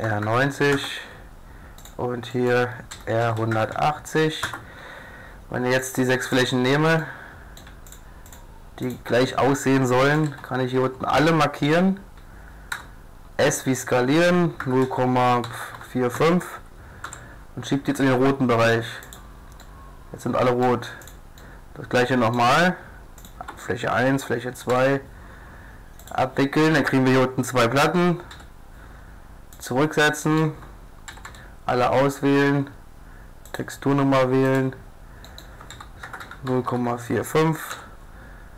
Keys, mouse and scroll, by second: 2.3 click, 2.9 r, 5.8 click, 7.0-8.6 middle drag, 10.3 a, 10.8 a, 12.7 s, 17.1 g, 19.6-21.0 drag, 21.0 middle click, 22.0 click, 22.2 middle click, 23.2-25.1 drag, 24.7 u, 28.3 u, 30.2-31.3 middle drag, 31.1 a, 31.3 click, 31.3 a, 31.5 middle click, 33.6 click, 34.8-35.3 drag, 35.4 click, 35.7 s, 37.7 g.